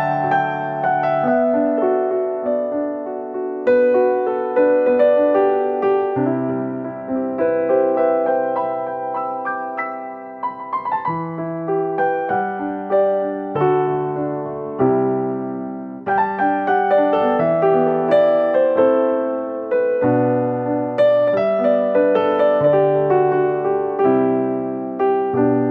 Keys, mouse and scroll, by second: 0.2 e, 1.6 r, 2.5 g, 3.4 e, 4.8 g, 5.9 r, 6.6 e, 8.3 r, 9.1 middle click, 10.4 g, 11.1 middle click, 11.5-12.0 scroll up 7, 11.9 middle click, 12.2-13.1 scroll down 11, 12.6 middle click, 13.1 middle click, 14.0 ctrl+z, 14.2 ctrl+z, 14.3 ctrl+z, 14.5 ctrl+z, 14.6 ctrl+z, 14.8 ctrl+z, 15.8 s, 16.5 e, 17.8 r, 18.8 click, 19.1 r, 19.8 g, 21.7 s, 23.7 g, 24.6 e.